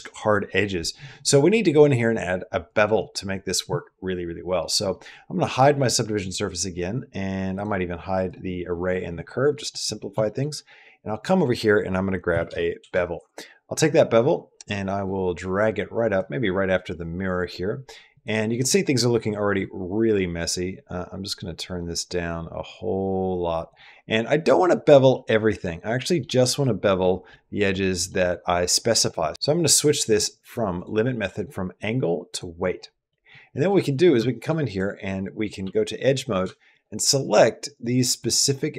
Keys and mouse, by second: 2.5 click, 5.3 click, 7.3 click, 8.0 click, 9.4 middle click, 10.0 shift+middle click, 10.9-13.0 drag, 13.0 typing, 14.8-16.0 drag, 17.9 click, 18.1 typing, 18.4 click, 19.5-23.5 shift+drag, 24.1 middle click, 25.0 middle click, 25.8 middle click, 26.2 middle click, 26.9 middle click, 27.5 middle click, 30.0 click, 30.2 click, 30.6 click, 30.6 typing, 31.1-32.2 drag, 33.0 middle click, 33.4 middle click, 34.1 shift+middle click, 34.5 click, 35.2-36.5 typing, 35.9 click, 36.5 shift+click, 38.0 shift+click, 38.5 shift+click.